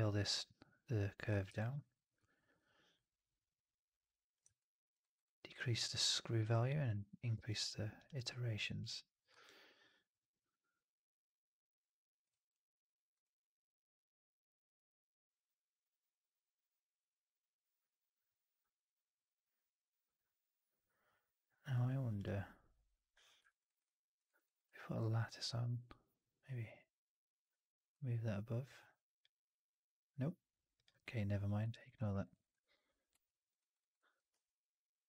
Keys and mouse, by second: 1.4 4, 4.5-4.8 alt+drag, 4.9 alt+right drag, 5.1 alt+right click, 5.4-6.3 alt+drag, 9.3-12.1 alt+drag, 23.4 alt+right drag, 23.5 alt+right drag, 23.7-24.1 alt+drag, 24.1 alt+right drag, 24.3 alt+right drag, 24.5 alt+click, 27.8-29.2 drag, 31.6 alt+click, 31.9 alt+middle click, 32.0 alt+right drag, 32.2 alt+right drag, 32.4-33.4 alt+drag, 33.5 alt+right drag, 33.7 alt+right drag, 33.8 alt+drag, 34.2 q.